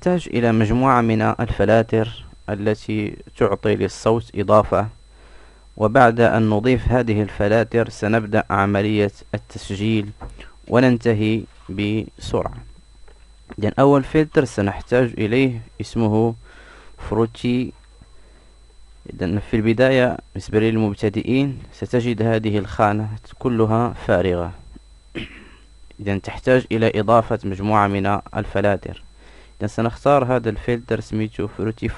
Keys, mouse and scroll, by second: 13.3-24.1 right drag, 26.5 ●.